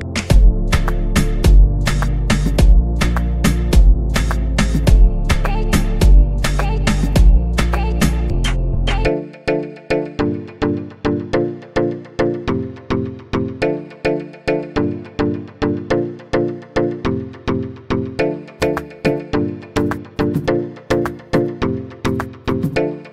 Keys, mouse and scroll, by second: 15.4-18.4 drag, 19.5 click, 21.1 KP_0.